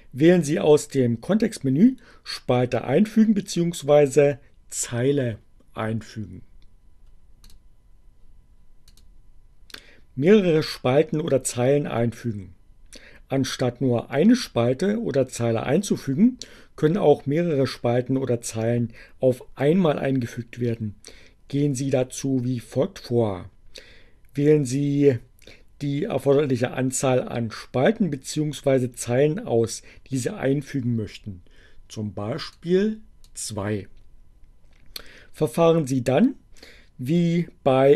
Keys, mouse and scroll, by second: 6.5 click, 8.9 click, 32.4-33.1 drag.